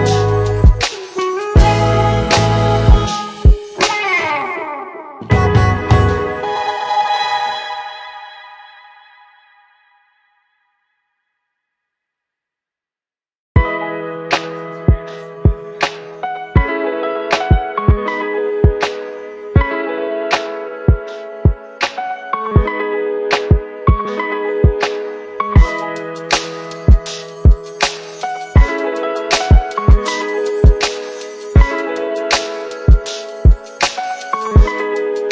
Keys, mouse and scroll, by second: 2.3-4.4 typing, 4.4 Return, 6.6-8.4 click, 12.2 ctrl+s.